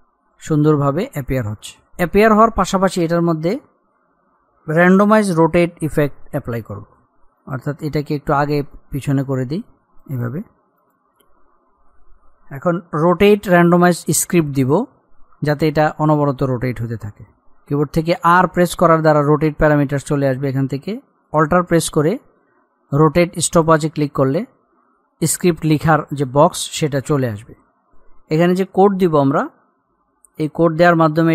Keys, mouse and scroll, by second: 7.4 click, 18.7 r, 23.5 alt+click, 28.1 click.